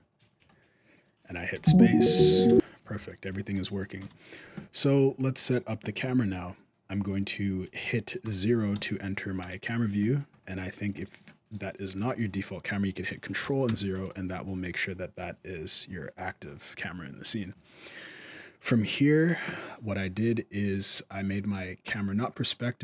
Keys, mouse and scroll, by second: 0.3 middle click, 0.3 scroll up 1, 1.3 space, 2.3 space, 3.0 shift+Left, 3.8 KP_0, 4.6-5.0 scroll down 4, 5.0 scroll up 1, 5.8 shift+middle click, 6.2-6.8 scroll up 1, 8.0 KP_0, 8.5 KP_0, 9.2 KP_0, 9.9-10.3 scroll down 4, 10.3 middle click, 10.8 shift+middle click, 11.8 right click, 13.4 ctrl+KP_0, 21.6 click.